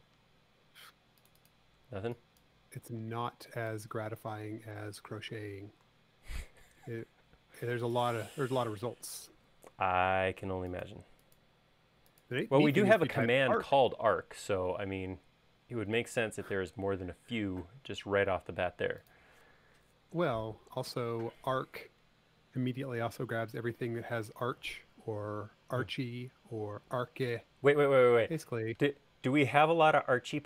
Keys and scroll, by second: 1.9 e, 3.1 space, 9.3 super+a.